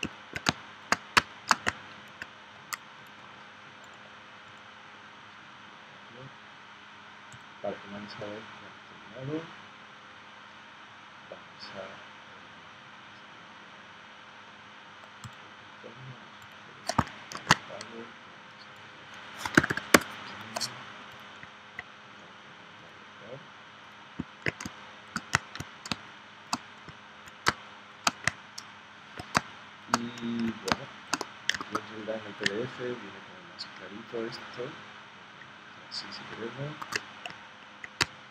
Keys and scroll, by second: 0.5 space, 1.2 space, 17.3 shift+super+g, 19.4 1, 19.9 Return, 24.6 space, 25.9 space, 27.5 space, 29.4 space, 30.7 space, 31.6 super+Tab, 36.8 super+Tab, 38.0 space.